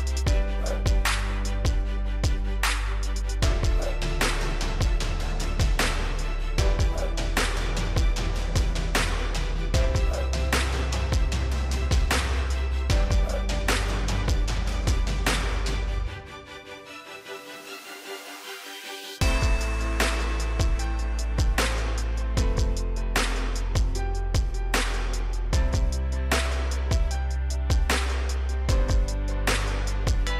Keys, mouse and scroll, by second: 1.9 scroll down 1, 3.0 click, 4.0 right click, 4.4 click, 4.8 scroll up 1, 5.0-5.8 scroll down 1, 5.8 click, 7.2 click, 8.0-8.4 scroll up 1, 9.9 click, 10.4 right click, 10.7 click, 12.1 ctrl+click, 12.8 click, 14.7 ctrl+click, 16.2-18.3 drag, 24.1 right click, 25.1 click, 25.5-26.3 scroll up 1, 26.3-27.1 scroll down 1, 27.1 right click, 28.2-29.3 drag.